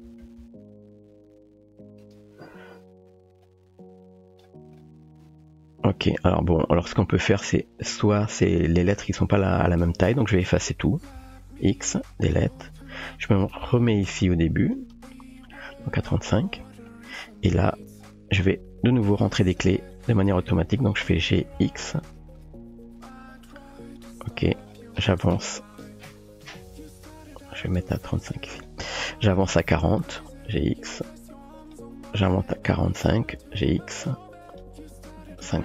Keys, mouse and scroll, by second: 0.1 g, 3.5 click, 11.3 x, 13.5 g, 16.9 shift+middle drag, 19.5 click, 21.3 g, 28.1-28.6 typing, 29.1-30.0 drag, 30.5 g, 32.4-33.0 drag, 33.3 g, 35.3-35.6 drag.